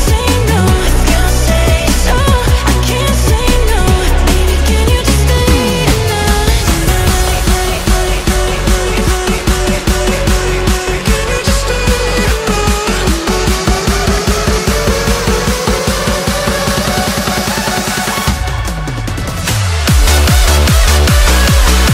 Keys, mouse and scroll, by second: 0.1 s, 1.9 middle click, 2.4 g, 3.3 KP_1, 3.7 shift+middle click, 4.0-4.4 scroll up 1, 4.4 s, 13.5 click, 14.9 r, 19.4 click, 19.8-20.2 scroll down 2, 20.2 shift+middle click, 20.6-21.9 scroll up 2.